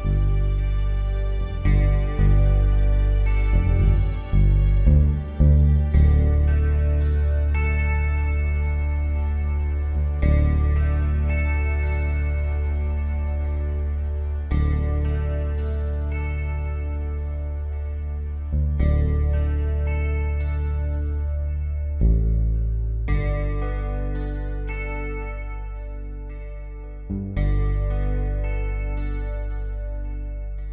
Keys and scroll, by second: 1.7 b, 4.7-5.1 typing, 12.5-14.5 typing, 17.2-18.7 typing, 23.5 typing, 26.3 ctrl+t, 29.2 Return.